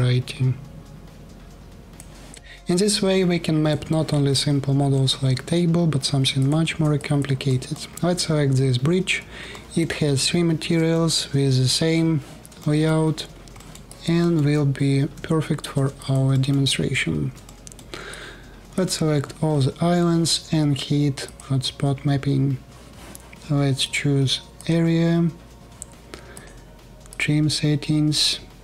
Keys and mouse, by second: 1.1-4.9 drag, 6.0 shift+click, 6.2-6.6 shift+middle drag, 6.6-7.4 alt+drag, 9.4 alt+click, 10.6 alt+drag, 12.3 alt+drag, 14.8 3, 18.1-18.5 alt+drag.